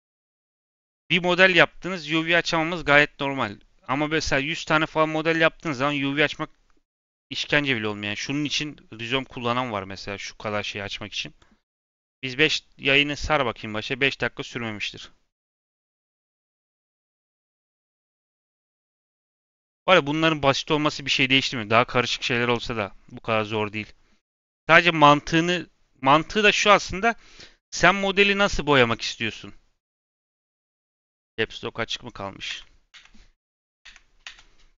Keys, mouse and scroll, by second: 8.5 click, 8.9-9.3 middle drag, 9.3-9.7 scroll up 2, 9.7 scroll down 2, 10.0-11.0 middle drag, 11.0 click, 22.5 click.